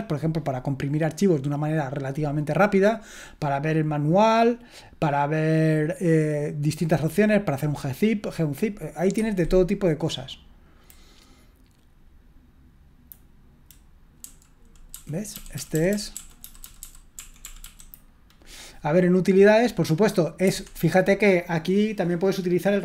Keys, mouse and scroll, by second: 9.1 Escape, 14.2 Down, 14.9 Down, 15.3 Up, 15.5 Up, 15.7 Up, 15.9 Up, 16.1 Up, 16.4 Down, 16.6 Down, 16.8-18.3 typing, 17.1 Right, 19.5 click, 20.5 Escape, 20.9-22.2 drag.